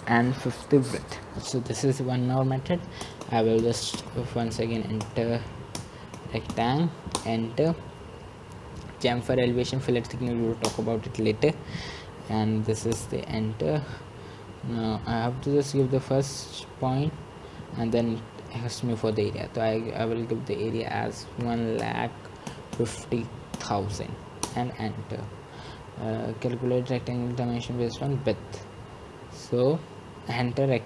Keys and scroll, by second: 3.4 Return, 6.1-8.0 typing, 21.6 Return, 24.7 typing.